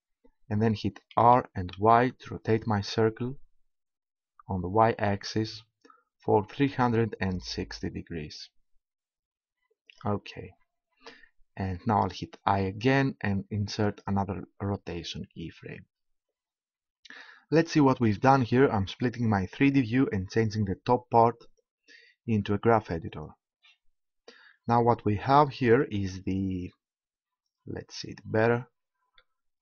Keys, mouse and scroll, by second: 1.2 r, 11.6 click, 12.5 i, 19.5-21.4 drag, 29.2-29.6 drag.